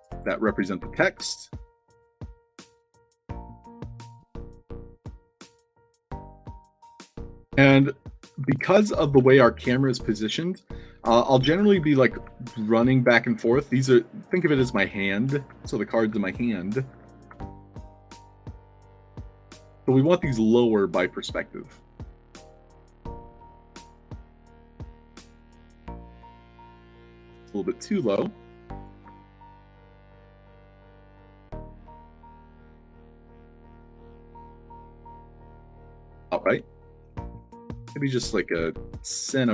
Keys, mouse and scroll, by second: 1.2 i, 4.3 click, 5.4-13.3 typing, 14.5 a, 15.4 d, 16.0 a, 16.9 d, 17.3 Tab, 18.2-19.6 typing, 19.4 click, 20.4 shift+click, 21.2 click, 22.2 click, 22.9 Tab, 24.4 d, 24.7 w, 26.4 w, 26.8 s, 27.1 Tab, 28.1 c, 28.7 click, 29.4 shift+click, 30.1 click, 30.9 Tab, 32.2-37.0 typing, 37.4 Tab, 37.4 Caps_Lock, 38.3-39.5 typing.